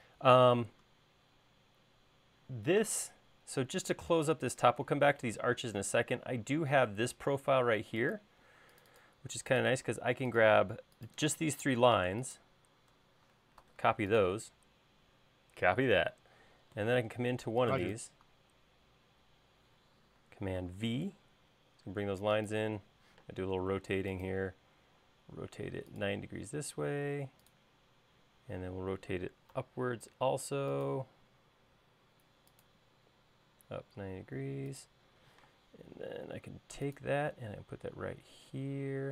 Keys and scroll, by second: 14.1 super+c, 21.1 super+v, 23.6 q, 30.0 Tab, 30.6 Tab, 35.8 m.